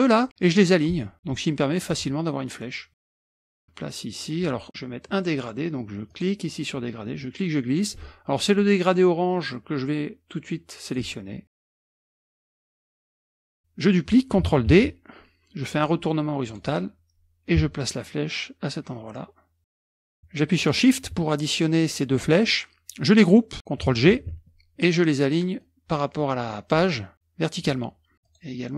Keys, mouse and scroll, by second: 1.0 click, 1.9 click, 3.1 KP_Subtract, 3.2 KP_Subtract, 3.3 F1, 3.4-4.7 drag, 6.1 click, 7.2 click, 8.6-11.2 drag, 12.0 ctrl+click, 12.4 ctrl+click, 12.9 ctrl+click, 13.2 F1, 13.5 middle click, 14.8 ctrl+d, 16.5 click, 17.5-19.9 ctrl+drag, 20.6 shift+click, 24.3 ctrl+g, 25.7-27.0 drag, 27.6 click, 28.3 click.